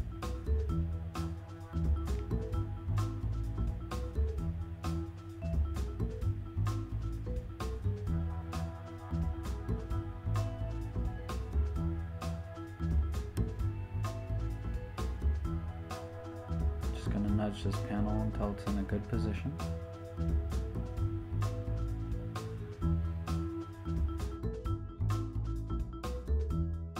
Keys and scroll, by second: 2.4 Return, 6.0 super+t, 11.8 Return, 16.9 shift+Up, 19.2 shift+Up, 22.7 shift+Up.